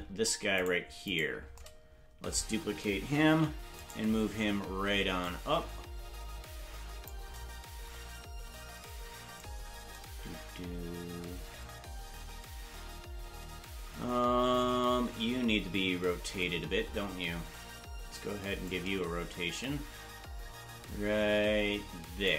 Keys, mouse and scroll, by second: 0.6 right click, 1.1 right click, 3.4 shift+d, 5.2-7.1 drag, 18.6-22.3 shift+drag.